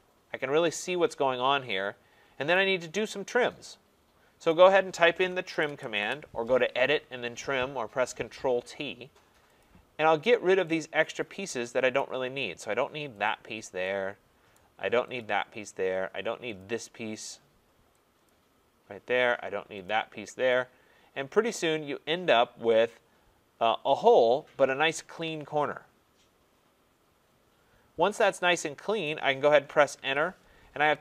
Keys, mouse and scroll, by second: 2.5 right click, 3.5 right click, 5.5-5.9 typing, 9.6 click, 12.0 right click, 13.3 click, 14.5 right click, 15.2 click, 16.6 click, 18.3 click, 19.9 click, 24.8 click, 29.0 right click, 29.9 Return, 30.0-31.0 right drag.